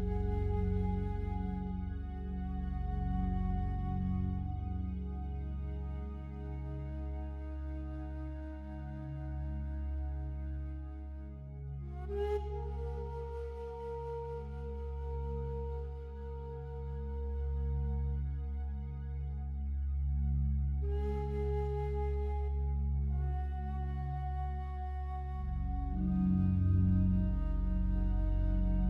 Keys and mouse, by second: 1.2 click, 3.5 g, 4.2 z, 5.8 click, 6.7-13.1 drag, 13.1 ctrl+z, 15.7 alt+g, 16.7 g, 17.0 z, 18.5 click, 19.4-23.4 drag, 24.2 ctrl+z, 24.6 ctrl+z, 26.0 g, 26.2 z, 27.6 click, 28.5-28.8 drag.